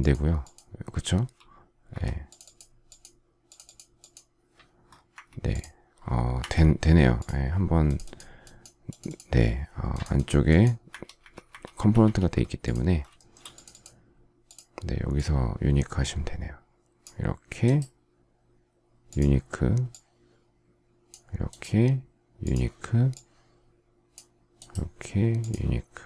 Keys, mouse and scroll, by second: 13.1 shift+middle click.